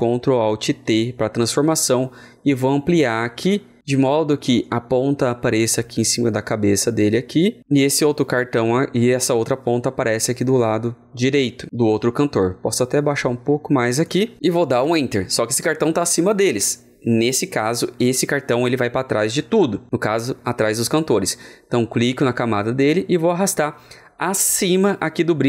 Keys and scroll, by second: 0.6 ctrl+alt+t.